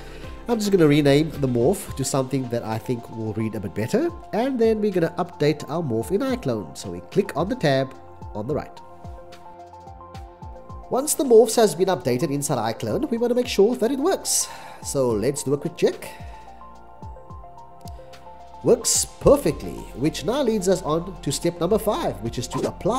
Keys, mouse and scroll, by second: 2.1 BackSpace, 4.0-5.7 typing, 7.5 -.